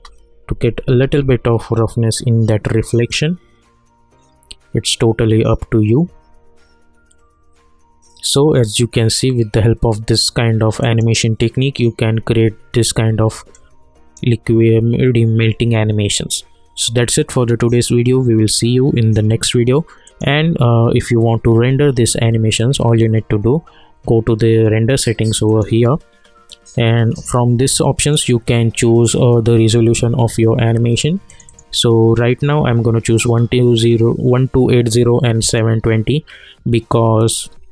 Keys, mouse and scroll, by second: 1.0 ctrl+r, 10.8 click, 13.5 alt+Num_Lock, 13.5-18.0 alt+right drag, 20.0 click, 25.4 click, 31.3 click, 35.4 click.